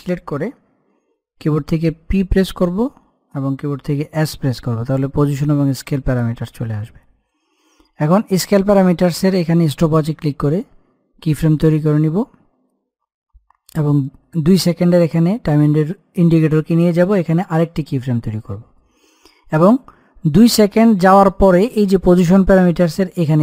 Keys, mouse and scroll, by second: 2.1 p, 4.3 shift+s, 9.7 click, 13.7 click, 17.5 click, 23.3 click.